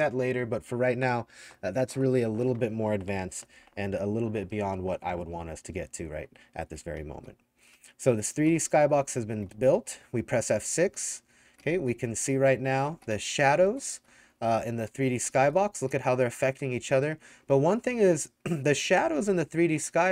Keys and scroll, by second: 6.2-20.1 typing, 6.6 Escape, 10.8 F6.